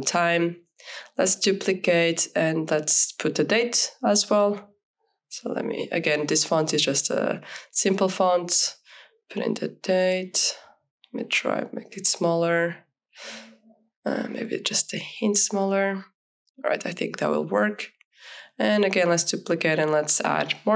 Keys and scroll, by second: 4.0 t, 4.7 i, 6.1-9.2 typing, 9.8 ctrl+a, 12.6 ctrl+a, 13.5 KP_1, 13.9 Return, 16.1 ctrl+a, 16.4 KP_1, 16.7 KP_4, 16.8 Return.